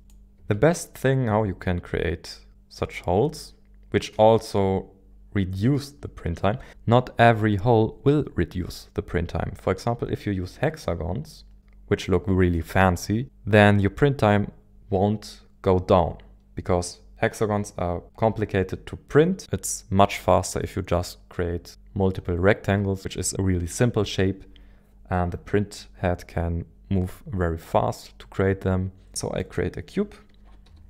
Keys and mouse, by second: 0.0 shift+click, 0.3 shift+a, 30.4 KP_1, 30.6 KP_7.